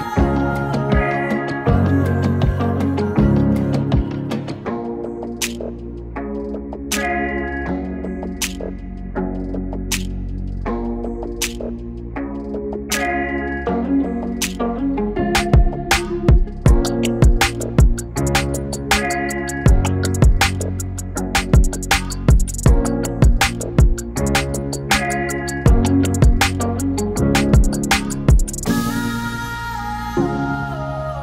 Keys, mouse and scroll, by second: 1.2 ctrl+z, 1.6-8.1 drag, 8.7 right click, 9.3 click, 11.6 ctrl+shift+c, 14.1-15.7 typing, 19.2-24.4 drag, 24.4 space, 26.0 space, 27.1 click, 28.3 ctrl+d, 30.1-31.2 drag.